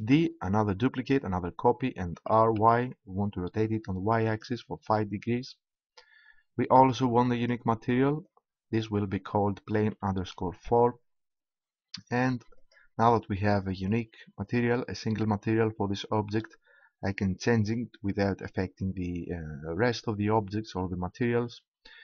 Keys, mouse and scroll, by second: 0.0 shift+d, 4.4-6.2 drag, 6.7-9.3 drag, 12.5-14.3 drag.